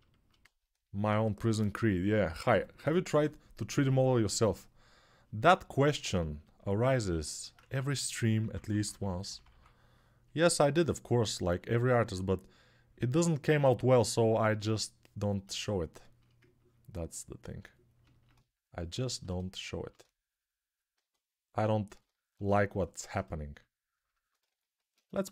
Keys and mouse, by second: 6.4 alt+right click, 7.4-9.3 typing, 12.3-25.3 ctrl+drag, 24.9 ctrl+Tab, 25.2 shift+a.